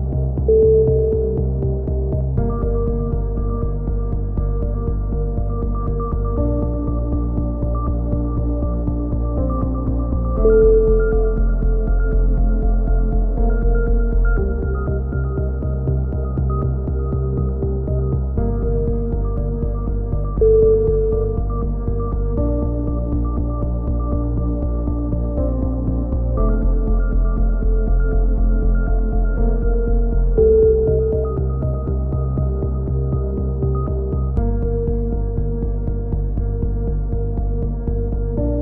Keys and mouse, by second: 0.2 z, 0.6 click, 0.6-1.3 middle drag, 1.3 click, 1.3-1.9 middle drag, 2.8-3.4 middle drag, 3.4-4.0 drag, 4.6-5.4 drag, 5.4 KP_7, 5.6 z, 12.6 a, 13.6 middle click, 14.5-15.1 middle drag, 14.9 a, 17.8 ctrl+r, 22.3 a, 22.5 z, 22.8 z, 23.9 ctrl+r, 24.5 a, 24.9 middle click, 25.0 k, 26.4 a, 26.6 drag, 27.6 click, 28.5-29.3 right drag, 29.3 g, 31.1 a, 32.7-33.4 right drag, 33.4-37.2 drag, 37.7-38.6 drag.